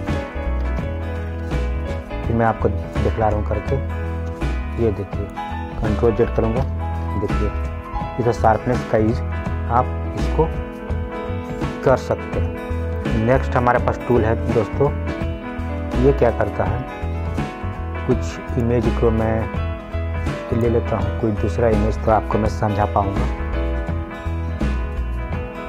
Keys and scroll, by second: 6.5 ctrl+z.